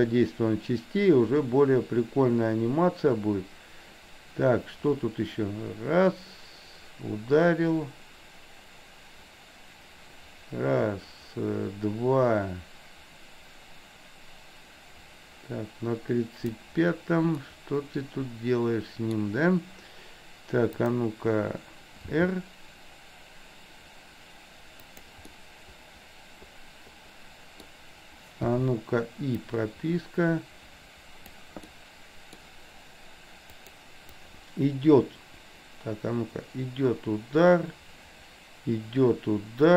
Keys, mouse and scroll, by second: 17.4-19.1 middle drag, 20.9 click, 22.0 r, 25.4-27.7 middle drag, 28.6 i, 29.5-31.5 drag, 31.6 middle click, 33.7 click, 34.2-39.7 drag.